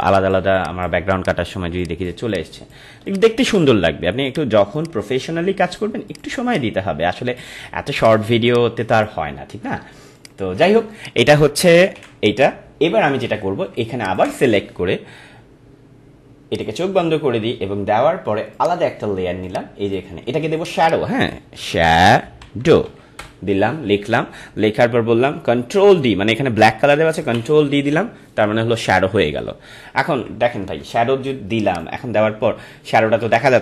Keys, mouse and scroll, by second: 0.0-3.2 typing, 0.1 click, 0.5 click, 1.1 click, 1.7 click, 2.3 click, 3.0 click, 4.2-8.0 alt+drag, 8.5-10.1 drag, 10.7 space, 10.9 click, 11.2 space, 11.9 ctrl+d, 14.0 ctrl+click, 21.4-23.4 typing, 27.2 ctrl+Delete, 30.3 ctrl+Delete, 31.7 click, 33.0 ctrl+-.